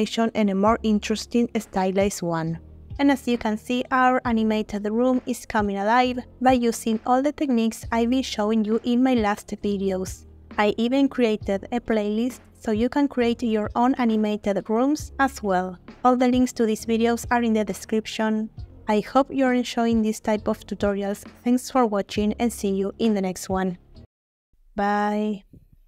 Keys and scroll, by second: 0.8 space.